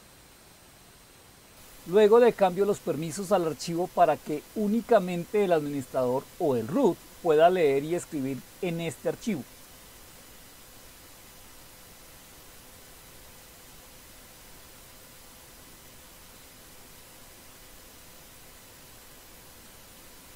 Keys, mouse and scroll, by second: 0.0-9.8 typing, 0.0 click, 0.9 Up, 1.0 Left, 1.1 Left, 1.6 click, 11.5-13.1 typing, 13.1 Tab, 14.5 Return, 14.8 typing, 17.5 Up, 17.8 typing, 18.8 Return, 20.1 typing.